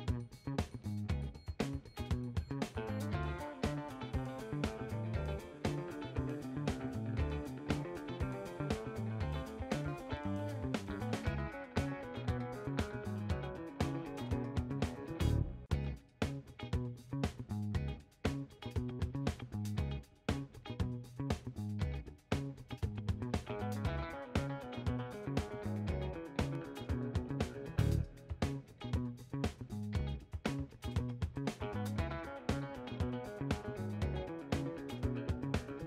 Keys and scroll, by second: 9.5 w, 12.6 ctrl+h, 16.9 3, 17.0 Return.